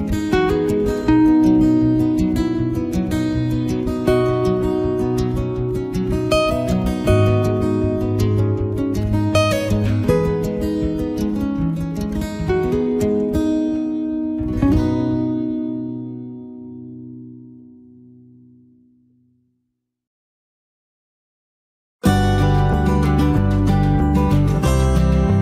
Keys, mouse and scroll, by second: 0.0 right click, 0.2 click, 1.2 right click, 1.5 click, 2.2 middle click, 2.4 shift+middle click, 2.5 middle click, 2.6 click, 3.1 f, 3.2 click, 3.5 ctrl+right click, 3.7 shift+right click, 3.9 click, 4.8 click, 4.9 shift+middle click, 5.2 ctrl+right click, 5.5 click, 5.7 click, 6.6 shift+middle click, 6.8 middle click, 7.1 shift+middle click, 7.2 shift+middle click, 7.2 ctrl+right click, 7.5 ctrl+right click, 7.7 f, 7.8 click, 8.6 click, 9.2 ctrl+z, 9.3 middle click, 9.7 f, 10.0 shift+click, 10.6 middle click, 11.6 ctrl+right click, 11.8 shift+right click, 12.0 right click, 12.1 f, 12.3 click, 13.2 middle click, 13.3 right click, 13.6 click, 14.3 middle click, 14.5 click, 14.7 right click, 15.6 click, 16.7 middle click, 17.6 middle click, 18.0 right click, 18.5 click, 19.2 f, 19.5 click, 19.8 click, 20.7 click, 20.9 right click, 21.1 click, 21.3 click, 22.0 click, 22.0 right click, 22.5 click, 22.6 click, 22.9 right click, 23.6 click, 24.3 middle click, 25.0 ctrl+right click.